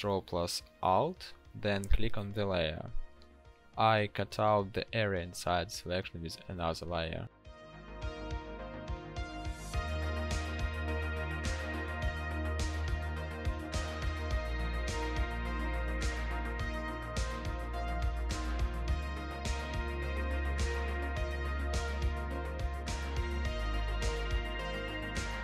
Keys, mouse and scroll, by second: 0.0 ctrl+click, 1.3 ctrl+alt+click.